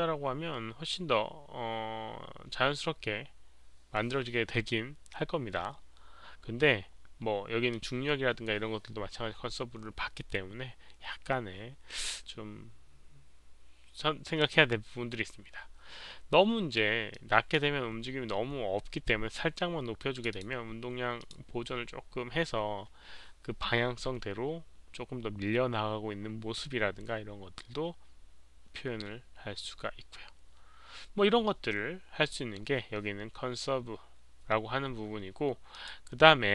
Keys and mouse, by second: 7.7 click, 17.1 click, 20.1 click, 20.3 click, 21.1 click, 27.9 click, 35.7 click.